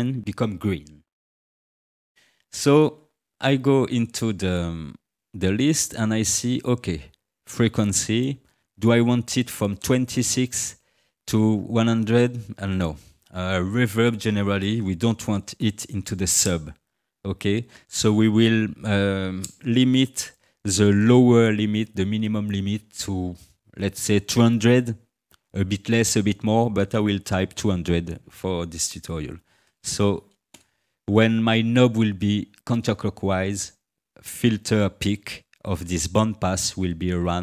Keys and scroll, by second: 29.3 2, 29.7 0, 30.5 Return.